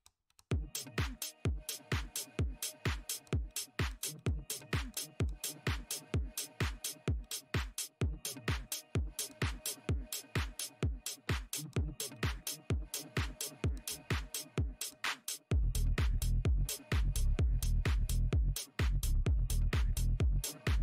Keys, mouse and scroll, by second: 0.0-0.4 typing, 1.7-2.9 typing, 3.7 Tab, 5.6 Tab, 6.4 Tab, 6.8 w, 8.0 Tab, 8.8 w, 9.3 Tab, 9.8 Tab, 11.0 w, 11.8 w, 12.6 Tab, 13.3 w, 14.1 Tab, 16.1 Tab, 16.8 space, 17.3 Tab, 17.9 Tab.